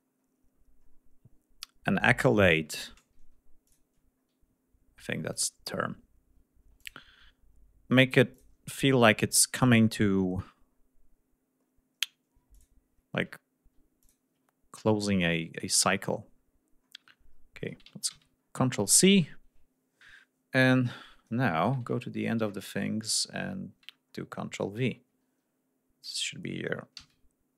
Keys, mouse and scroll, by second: 0.1 scroll down 1, 0.3 scroll up 2, 0.7-1.2 scroll down 4, 1.6-2.0 scroll down 2, 2.1 scroll up 2, 2.4 scroll down 2, 3.5 ctrl+click, 4.0 ctrl+scroll down 2, 5.2 ctrl+click, 6.6 ctrl+click, 8.2 ctrl+click, 8.6 ctrl+scroll down 2, 9.4 ctrl+click, 10.0 ctrl+scroll down 3, 10.8-11.5 scroll down 2, 11.6-12.0 scroll up 2, 12.4 ctrl+click, 13.2 ctrl+scroll down 3, 13.9 ctrl+click, 14.3-15.7 ctrl+scroll down 5, 15.7-16.1 scroll up 2, 16.2-16.7 scroll down 2, 16.7-17.1 scroll up 3, 17.1 ctrl+scroll down 2, 18.0 ctrl+c, 18.0 ctrl+scroll down 2, 18.3-19.3 ctrl+scroll up 5, 21.9 ctrl+scroll up 2, 22.2-22.6 ctrl+scroll down 3, 22.7 scroll up 2, 23.1 ctrl+scroll down 2, 23.5-24.2 ctrl+scroll up 4, 24.5-25.2 ctrl+scroll up 4, 26.9 ctrl+v.